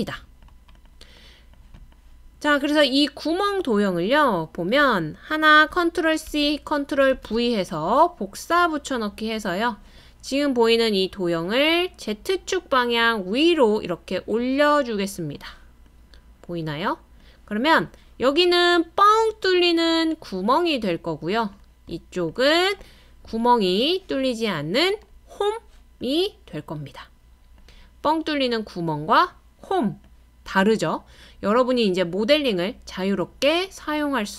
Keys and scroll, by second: 6.3 super+c, 7.1 super+v.